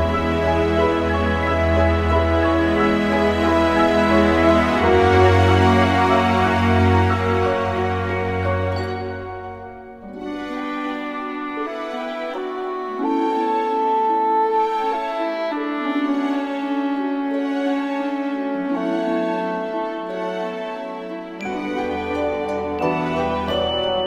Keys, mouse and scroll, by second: 6.7 a, 8.4 shift+a, 13.4 s, 16.4 Tab, 18.5-19.8 typing, 18.9 ctrl+Tab, 20.4 Tab, 22.0-23.7 typing.